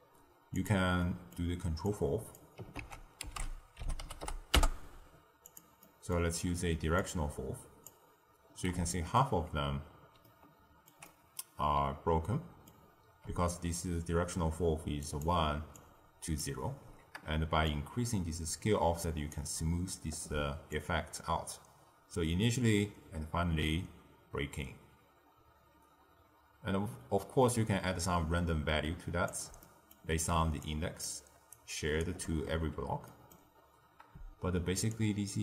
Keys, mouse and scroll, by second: 0.5 click, 0.9 middle click, 1.8 click, 2.7 ctrl+a, 5.8 middle click, 6.2-6.9 scroll up 1, 6.9 drag, 8.8-13.2 middle drag, 13.2-14.9 d, 14.9 click, 15.2-15.6 d, 15.7 click, 16.3 d, 17.6-23.7 shift+drag, 29.5 middle click, 30.2 d, 30.5-31.0 drag, 31.0-31.4 d, 31.4 right click, 31.9 d, 32.0 d, 33.0 middle click, 33.5-34.8 scroll up 1, 34.8 scroll up 2, 34.8-35.4 shift+drag.